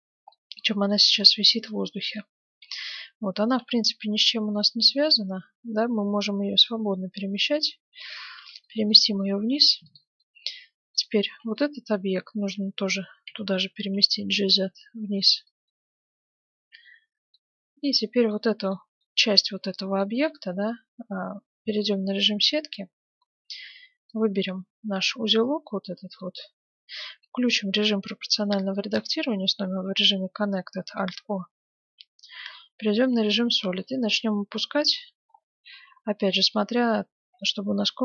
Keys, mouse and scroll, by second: 0.3-2.4 middle drag, 1.4-2.8 right drag, 2.8-5.0 middle drag, 3.4 g, 8.6-10.9 middle drag, 9.9-12.6 right drag, 11.5-13.5 middle drag, 12.4 z, 13.7 g, 15.8-17.3 middle drag, 17.9-19.5 right drag, 18.3-20.8 middle drag, 18.9 Tab, 21.0 z, 22.9 a, 23.5 b, 25.6-27.5 middle drag, 28.7 alt+o, 31.4 z, 32.3-34.6 middle drag, 33.7 g, 37.2 g.